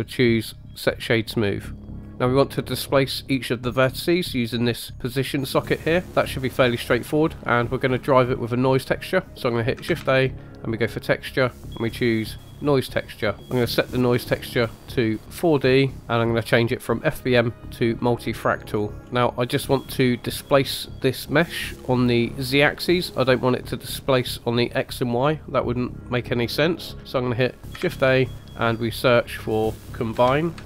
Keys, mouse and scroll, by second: 1.1-2.5 typing, 2.0 click, 2.1-2.5 scroll up 2, 9.8 shift+a, 13.4 middle click, 13.9-15.1 drag, 17.1-18.7 drag, 19.0 scroll up 2, 27.8 shift+a.